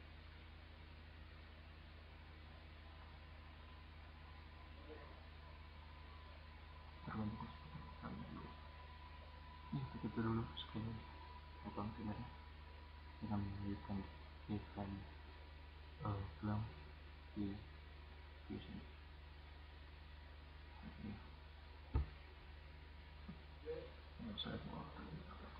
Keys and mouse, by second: 9.1 click, 14.1-16.6 right drag.